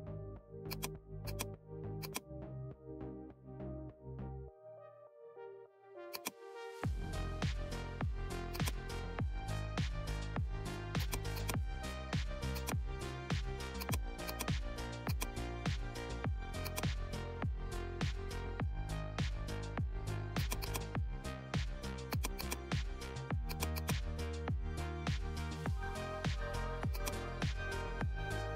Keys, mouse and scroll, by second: 13.1-13.7 scroll up 1, 13.7-26.9 drag.